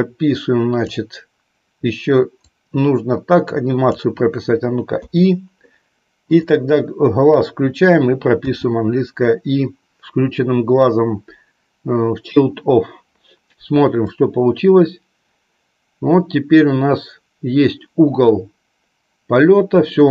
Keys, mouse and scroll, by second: 2.5-4.0 drag, 14.2-20.1 drag.